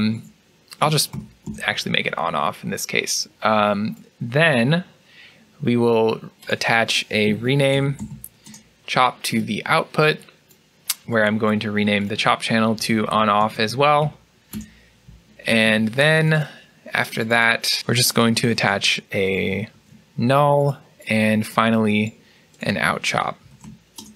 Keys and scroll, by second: 0.0-0.5 typing, 7.1 typing, 8.2 typing, 12.4-13.1 typing, 14.4 typing, 18.4 alt+n, 19.6 alt+n, 23.3-23.9 typing.